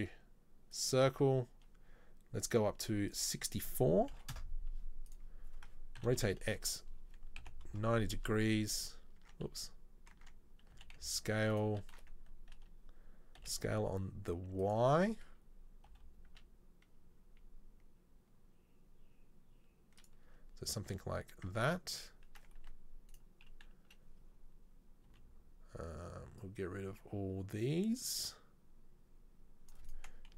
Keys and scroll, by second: 6.0 r, 9.2 Tab, 10.2 Tab, 10.8 s, 13.4 s, 16.0 g, 20.8 Tab, 21.6 Tab, 22.7 1, 25.2 c.